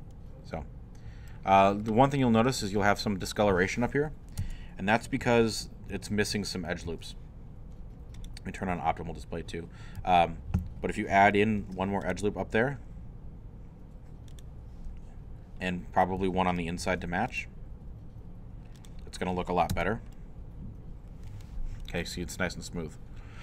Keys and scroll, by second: 4.4 Tab, 5.2 Tab, 5.9 Tab, 6.9 Tab, 10.0 Tab, 11.6 ctrl+r, 16.8 ctrl+r, 19.7 Tab.